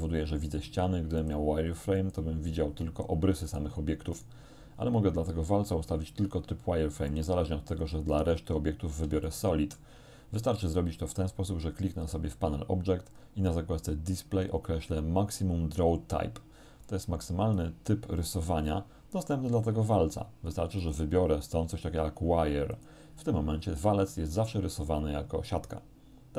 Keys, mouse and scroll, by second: 1.2 click, 2.0 click, 3.5 right click, 4.2 right click, 7.1 click, 7.8 click, 9.3 shift+middle click, 12.0 click, 13.0-13.4 scroll down 2, 16.9 click, 20.8 click, 22.8 click, 24.2-26.3 middle drag.